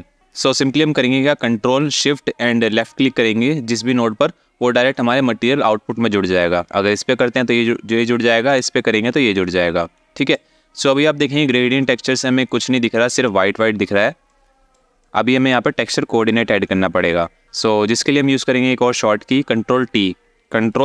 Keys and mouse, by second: 2.4 ctrl+shift+click, 6.5 ctrl+shift+click, 8.1 ctrl+shift+click, 9.9 alt+shift+middle click, 13.9-14.4 drag, 14.7 click, 14.9-15.9 drag.